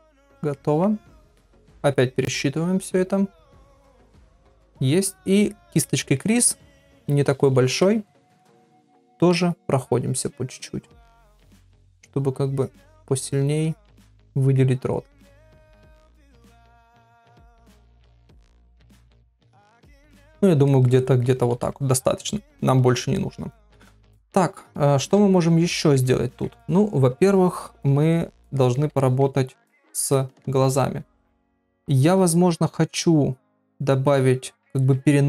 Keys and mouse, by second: 0.1 shift+click, 0.5 middle click, 1.3 shift+click, 3.4 ctrl+r, 3.8 ctrl+middle click, 5.8 middle click, 6.8-7.2 [, 7.3 [, 8.1 ctrl+middle click, 8.4 middle click, 9.0 middle click, 10.2 click, 10.6 click, 10.9 click, 11.2 click, 11.6 click, 12.5 click, 12.9 click, 13.3 click, 13.7 click, 13.9 click, 14.3 middle click, 15.1 click, 15.5 click, 16.2 click, 16.5 click, 17.3 click, 17.6 middle click, 18.3 click, 18.6 click, 18.9 click, 19.2 click, 19.5 click, 20.0 ctrl+middle click, 20.3 middle click, 20.7 ctrl+middle click, 21.0 middle click, 22.7 ctrl+r, 23.2 middle click, 25.8 ctrl+middle click, 28.5 ctrl+middle click, 29.0 shift+middle click, 29.3 middle click, 30.1 middle click.